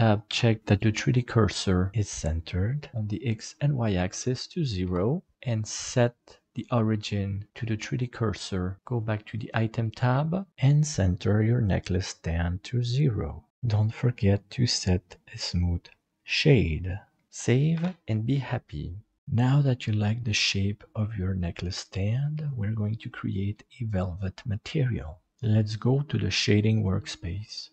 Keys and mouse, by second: 2.3-4.8 drag, 6.0-8.0 drag, 9.2 click, 10.2 shift+middle click, 10.5 click, 12.4 shift+middle click, 13.5 ctrl+KP_Decimal, 14.8-15.9 drag, 17.7 ctrl+s, 19.2-23.5 middle drag.